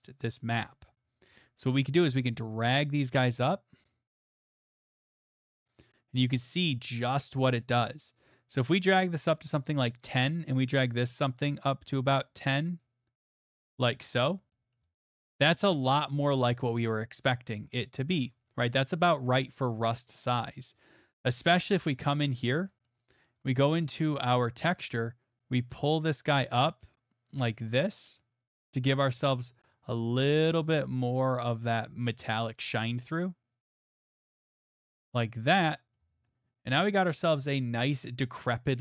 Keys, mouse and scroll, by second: 3.9 click, 6.8 click, 9.8 click, 12.8 click, 13.3 click, 14.4 click, 14.7 middle click, 14.8 middle click, 14.8 middle click, 14.8 middle click, 15.5 right click, 15.5-17.3 scroll, 17.5 scroll, 18.3-19.4 scroll, 19.4 scroll, 20.4 scroll, 21.4-22.3 scroll, 22.3 scroll, 22.8 middle click, 23.1 middle click, 23.4 middle click, 23.4 middle click, 23.8 middle click, 24.2 middle click, 28.8 click, 32.0 click, 35.4 click, 35.9 middle click, 36.0 middle click, 36.0 middle click, 36.6 middle click, 36.6 middle click, 37.0 middle click, 37.0 middle click, 37.1 middle click, 38.2 middle click.